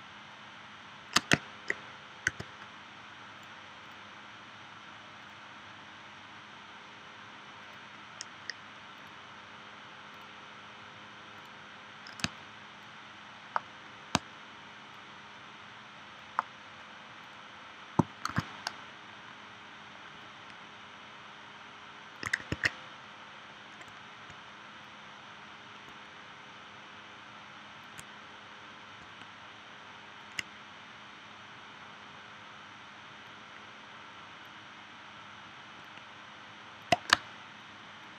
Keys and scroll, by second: 2.3 v, 12.3 space, 14.1 space, 18.3 shift+w, 22.5 super+z, 37.1 space.